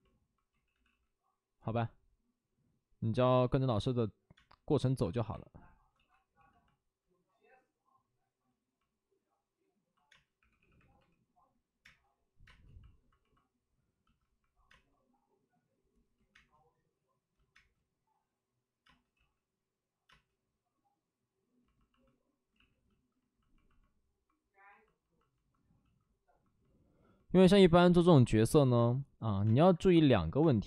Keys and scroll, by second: 0.4 ctrl+z, 4.3 space, 4.9 1, 5.8 ctrl+z, 6.3 5, 10.0 space, 10.3 3, 10.5 3, 11.7 3, 11.7 space, 16.1 ctrl+z, 16.1 space, 16.2 space, 17.5 space, 18.8 space, 19.1 ctrl+z, 20.0 space, 22.4 ctrl+z, 27.9 space, 29.4 space, 30.3 space.